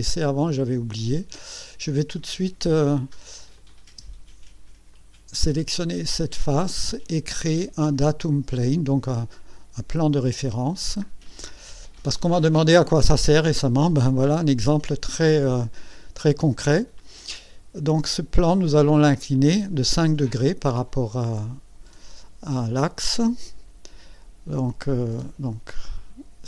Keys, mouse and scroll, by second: 1.0 click, 1.8-2.2 scroll up 1, 3.6 click, 3.9 space, 4.9 click, 5.4-6.8 drag, 10.0 click, 11.5 scroll down 1, 25.7 click.